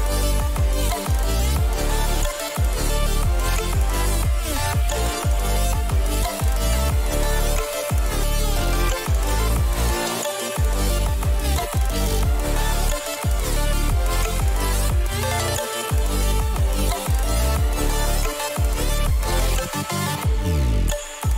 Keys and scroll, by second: 4.7 ctrl+=, 5.0 ctrl+=, 5.4 ctrl+=, 6.6 ], 12.1 ctrl+-.